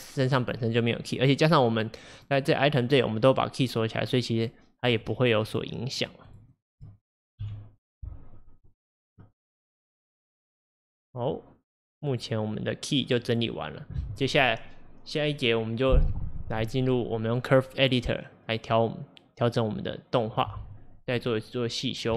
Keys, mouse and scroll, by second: 0.3 click, 2.2 click, 4.0-7.5 drag, 7.5 Delete, 8.7 click, 10.9-11.7 drag, 12.1 click, 13.3 click.